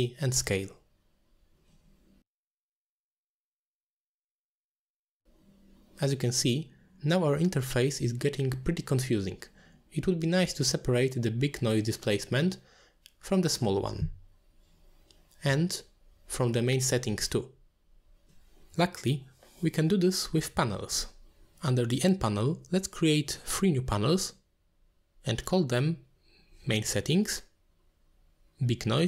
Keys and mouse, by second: 3.1 middle click, 3.4 middle click, 4.0 click, 4.2 ctrl+h, 4.3 middle click, 5.4-6.4 shift+drag, 7.2 click, 7.8 middle click, 8.0 click, 8.2 ctrl+h, 8.3 middle click, 8.6 middle drag, 8.7 click, 8.8 ctrl+h, 9.1 middle click, 9.7 click, 9.9 shift+click, 11.1 click, 11.3 ctrl+h, 19.8 middle click, 22.2-23.4 drag, 24.2-25.2 drag, 25.8-26.6 drag, 27.3-29.0 drag.